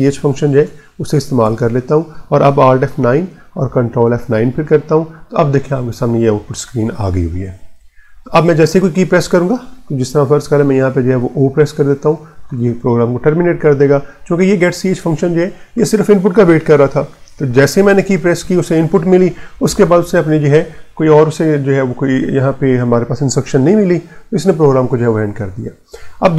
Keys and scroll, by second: 0.0-1.3 typing, 2.7 alt+F9, 3.5 Return, 4.2 ctrl+F9, 11.3 o.